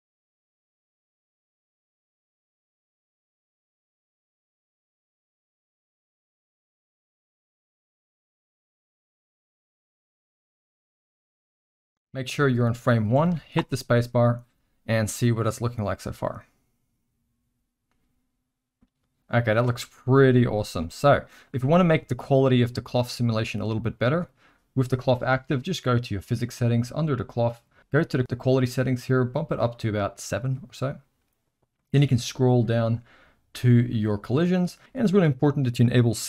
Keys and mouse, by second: 0.0-3.0 typing, 0.7 click, 3.2 Tab, 3.6 Tab, 4.9 ctrl+KP_Add, 5.3 u, 5.8 ctrl+KP_Subtract, 6.3-9.1 typing, 6.8 click, 8.0 click, 12.7 click, 13.2 alt+a, 13.7 space, 19.9 space, 20.8-21.2 middle drag, 21.9 z, 23.1-23.4 middle drag, 29.4 click, 29.6 click, 34.1 click.